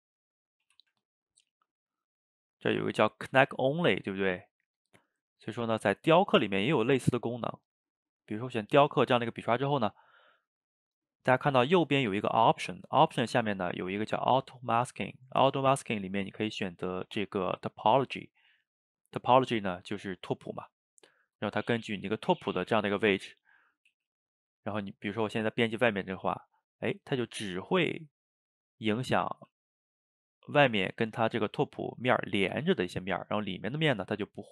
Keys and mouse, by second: 0.8 Tab, 1.8-2.3 drag, 2.5 click, 2.9-5.4 drag, 6.0 click, 7.2-10.2 drag, 12.8-15.8 drag, 21.1-23.9 middle drag, 23.9 f, 24.4-26.0 middle drag, 26.0-27.7 drag, 27.7 middle click, 28.4-29.4 drag, 29.4 f, 30.0 middle click, 30.7 click, 31.2 middle click, 31.9 click, 32.8 middle click, 33.5 click, 34.0 middle click.